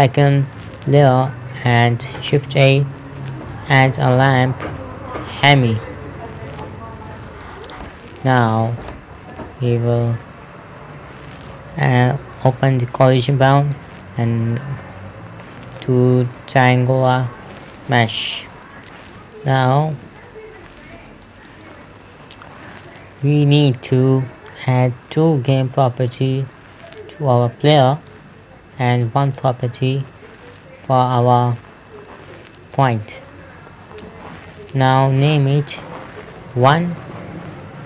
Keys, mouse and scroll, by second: 2.5 shift+Num_Lock, 2.7 a, 5.8 click, 9.2 right click, 10.9 scroll down 1, 12.8 click, 16.8 click, 17.4 scroll down 1, 17.5 middle click, 18.3-18.7 scroll up 1, 19.1 middle click, 21.7 right click, 25.9 click, 28.4 right click, 29.7 click, 33.2 right click, 35.1 click, 37.1 KP_1, 37.5 Return.